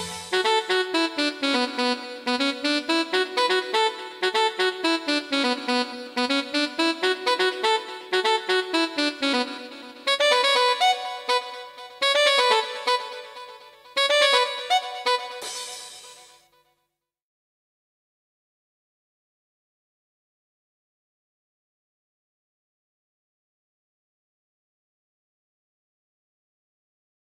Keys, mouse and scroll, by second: 0.4 click, 1.2 click, 3.3 click, 5.0 F11, 7.3 shift+F5, 8.6 shift+scroll up 1, 9.7-11.7 right drag, 11.7 click, 13.3-14.7 scroll up 4, 15.1 click, 16.3 2, 16.6 4, 16.9 Return, 19.0 click, 19.9 click, 21.4 click, 22.4 click, 26.6 click.